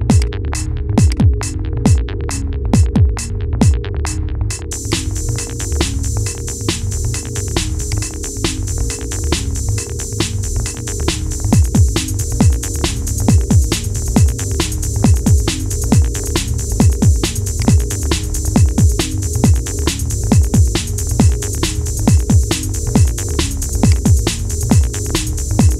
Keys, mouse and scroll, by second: 0.2-0.8 middle drag, 0.8 click, 1.5 scroll down 2, 2.1-2.9 middle drag, 2.9-3.4 scroll up 2, 3.4 /, 4.6 click, 7.9-8.4 scroll up 5, 8.4-9.2 shift+middle drag, 9.2-10.2 scroll up 3, 10.2 KP_1, 10.5-11.2 scroll up 2, 11.3 g, 13.7 scroll down 2, 14.5-15.6 scroll down 11, 15.6-16.3 scroll up 2, 17.3 click, 17.8 scroll down 5, 18.0 scroll up 1, 18.1-18.8 middle drag, 18.8 scroll up 2, 19.3-20.3 shift+middle drag, 20.3-20.6 scroll down 3, 20.6-21.9 middle drag, 21.9-22.3 scroll up 2, 22.3-24.3 shift+middle drag, 24.3 click.